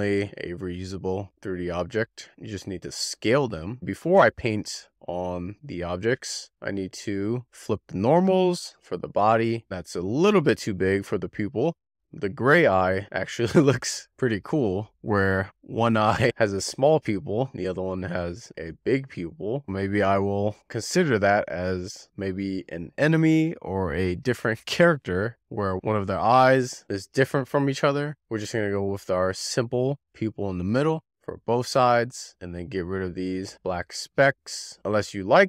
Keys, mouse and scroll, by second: 1.5 click, 2.1-3.1 scroll down 8, 2.6 shift+middle click, 3.5 click, 3.7 scroll up 1, 3.8 shift+middle click, 4.1-5.2 drag, 5.6 click, 6.2 a, 6.6-7.4 drag, 8.1 click, 9.4 click, 9.5-10.0 scroll up 10, 10.0 click, 10.8-11.2 scroll down 5, 28.0 scroll up 7, 28.3 click, 28.5-29.2 scroll down 10, 29.3-29.6 scroll up 11, 30.0 scroll down 8, 30.2 shift+middle click, 30.5 middle click, 30.8-31.1 scroll up 5, 32.1-32.6 scroll up 12, 32.6 click, 32.8 click, 33.7 click, 34.0-34.3 scroll down 5, 34.3 shift+middle click, 34.6 scroll up 6, 34.9 shift+middle click.